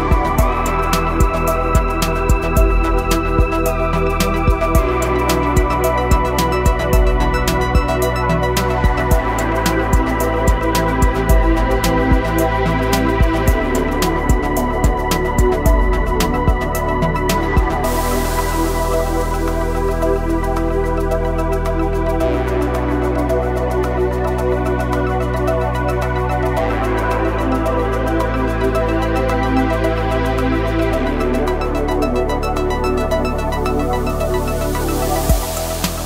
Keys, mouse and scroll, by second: 9.8-10.2 typing, 18.9 scroll down 1, 20.0-27.2 drag, 21.2 typing, 29.5-33.0 drag, 34.3 click.